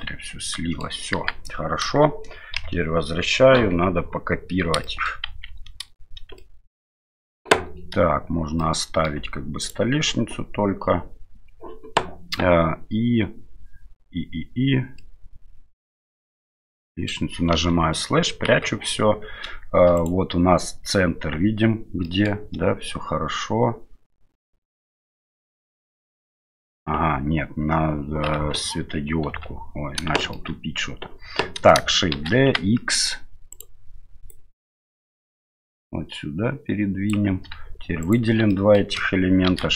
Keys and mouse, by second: 0.0-0.8 middle drag, 1.2 KP_1, 2.6 KP_Divide, 3.6 KP_7, 4.8 shift+middle drag, 5.3 shift+z, 6.4-6.9 shift+middle drag, 8.6-9.1 middle drag, 9.6 shift+right click, 15.0-17.1 middle drag, 17.5 KP_Divide, 18.5 KP_7, 20.0 right click, 22.0 shift+middle drag, 28.4 KP_Divide, 29.3 KP_7, 30.2 shift+middle click, 32.2 shift+d, 34.3-37.1 drag, 38.0 shift+click, 38.5 shift+middle click, 39.5 shift+d.